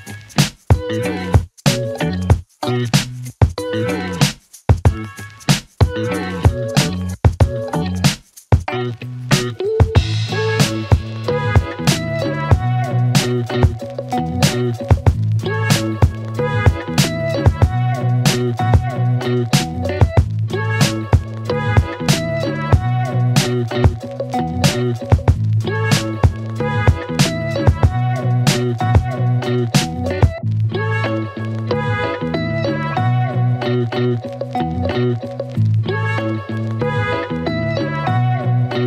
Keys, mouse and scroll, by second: 8.4 space, 8.5-9.4 click, 8.8 space, 10.3-11.7 click, 13.6 space, 13.8 click, 13.9 space, 14.6-16.7 click, 21.6 space, 21.8 click, 22.0 space, 22.8 click, 31.2 click, 34.6 click, 35.3 shift+click, 36.2 r, 37.2-38.8 click.